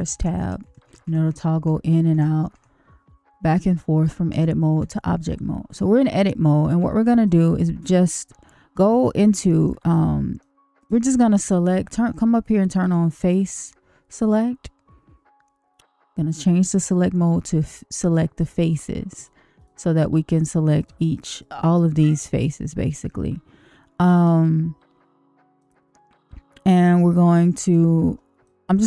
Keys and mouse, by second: 0.1 Tab, 0.3 Tab, 0.6 Tab, 0.8 Tab, 1.0 Tab, 1.2 Tab, 1.5 Tab, 2.1 Tab, 2.5 Tab, 4.3 Tab, 4.7 Tab, 7.2-9.0 middle drag, 9.4 shift+middle click, 9.9 middle click, 12.8 click, 19.9 click, 21.2 click, 22.1 click, 23.0-24.2 middle drag, 25.5-27.7 middle drag, 28.4 middle click.